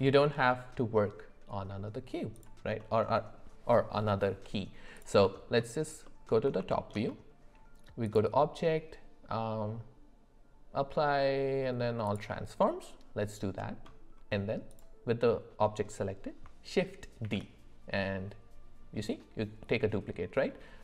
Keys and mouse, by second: 2.8 middle click, 5.3 alt+middle click, 5.6 alt+middle click, 6.7 shift+middle drag, 8.1-12.2 drag, 17.2 shift+d.